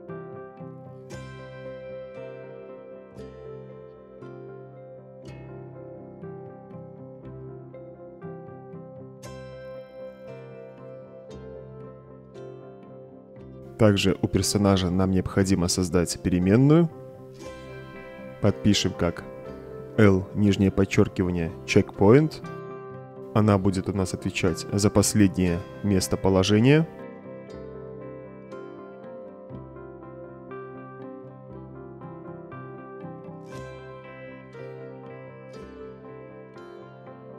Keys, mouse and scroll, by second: 0.0-0.4 typing, 3.3 click, 4.1-5.6 drag, 6.6-7.2 drag, 8.6 click, 9.9 click, 11.8-12.3 drag, 14.7 middle click, 16.7 click, 20.5 l, 21.2 shift+-, 22.2-23.9 typing, 25.5 o, 26.7-28.6 typing, 30.2 click, 31.9 click, 34.1 click, 35.3 click.